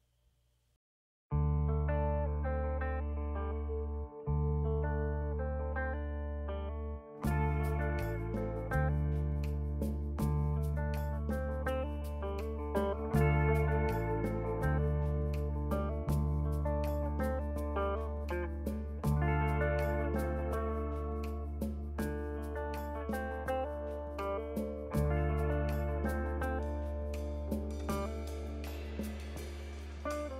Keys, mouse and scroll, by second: 1.1 ctrl+z.